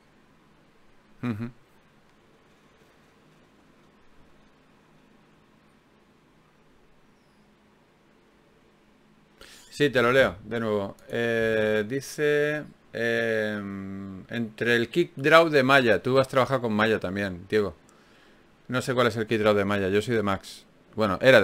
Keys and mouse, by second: 4.9 middle click, 8.5-11.9 middle drag, 11.9 right click, 12.3-13.7 drag, 13.7 f, 14.5 ctrl+Tab, 17.5 f, 17.8 click, 19.1 ctrl+Tab, 19.9-21.4 drag, 20.8 g.